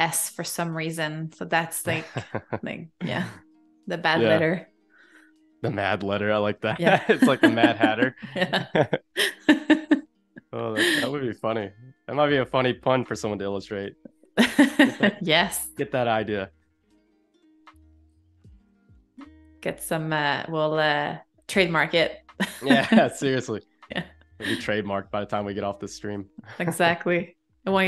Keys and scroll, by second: 14.8 space, 17.9 i, 18.7 a, 24.5 a.